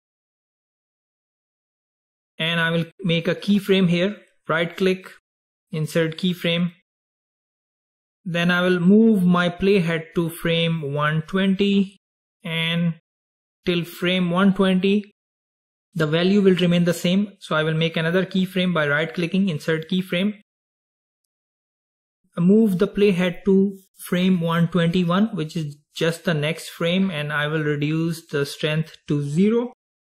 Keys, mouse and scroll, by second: 4.9 right click, 8.5-11.6 drag, 18.1 right click, 24.0-27.0 drag, 28.3-30.0 drag.